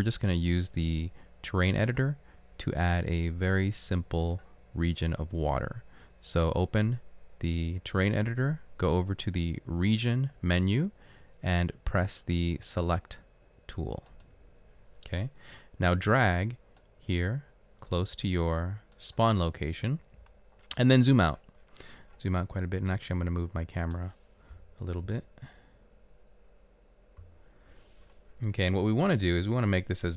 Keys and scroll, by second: 24.6-25.8 typing.